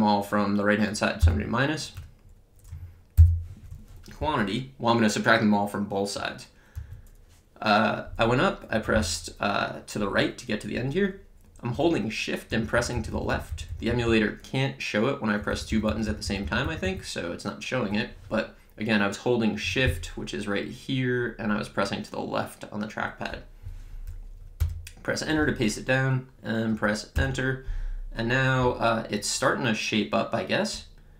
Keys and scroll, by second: 1.2 -, 2.0 Return, 3.2 (, 4.2 Up, 6.8 Right, 24.5 Return.